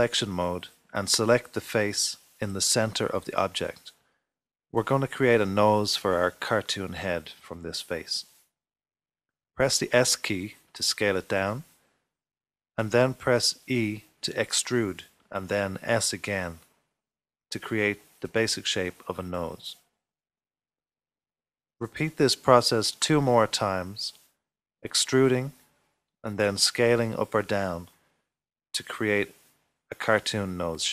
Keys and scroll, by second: 10.9 typing, 12.7 typing, 17.8 typing, 19.0 typing, 21.6 typing, 24.4 typing, 26.2 typing, 27.3 typing, 29.2-30.0 typing.